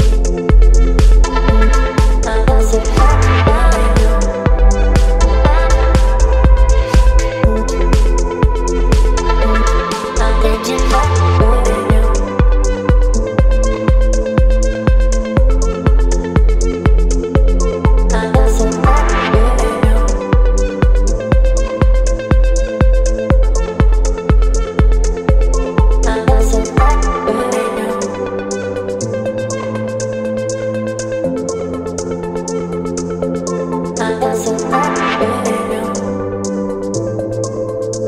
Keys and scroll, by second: 1.1 Return, 10.6 KP_0, 11.2 Return, 16.5 space, 33.9 Return, 35.2 space.